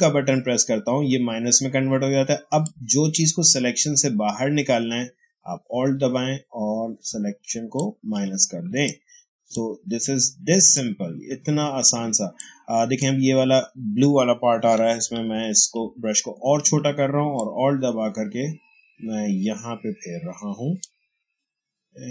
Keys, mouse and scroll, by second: 2.6 alt+click, 8.6 space, 8.8-14.8 ctrl+drag, 14.8-15.6 typing, 17.3-22.1 alt+drag.